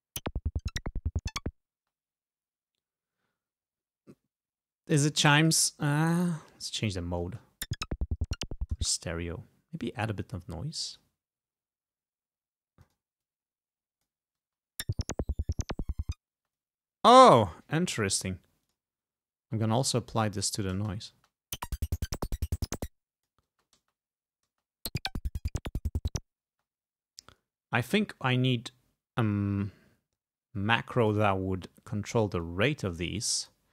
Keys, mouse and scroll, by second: 1.8 space, 5.5 click, 6.7 click, 7.3 space, 8.9 space, 9.8 middle click, 10.1-11.2 drag, 12.9 click, 13.3-14.3 drag, 14.5 space, 16.4 space, 16.6 click, 18.8 click, 19.8 click, 20.8 space, 22.4 click, 22.7 space, 23.0 click, 23.6 space, 24.6 space, 26.6 space, 27.9 click, 31.1 click, 32.5-33.7 drag.